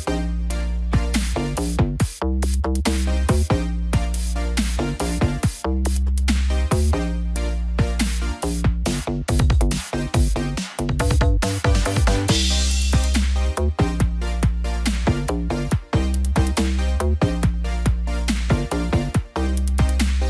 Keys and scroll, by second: 8.1 shift+F5.